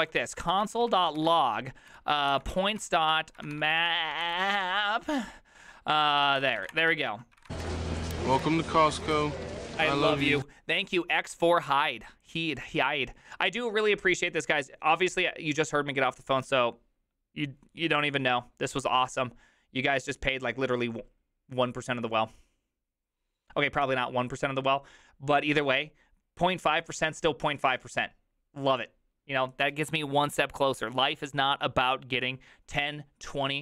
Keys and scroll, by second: 0.0-9.0 typing.